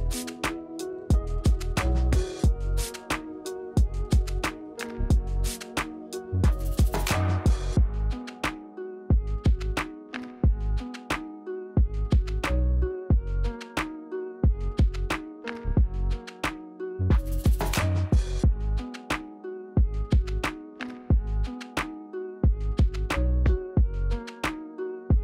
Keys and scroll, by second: 0.3 space, 3.8 space, 18.0 Return, 19.0 Return, 20.1 Return, 20.9 Return, 21.5 Return, 22.5 Return, 23.7 Return.